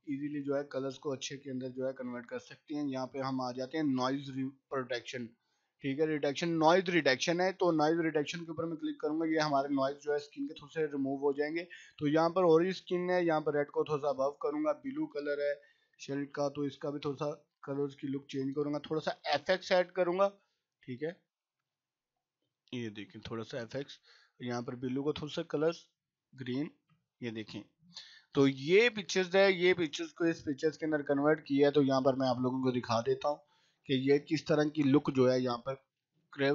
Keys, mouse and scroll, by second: 1.2 scroll down 1, 5.1-18.4 drag, 18.4 scroll down 1, 20.0 click, 21.0 scroll down 1, 22.4 click, 23.4 scroll down 1, 24.4 click, 30.4 click.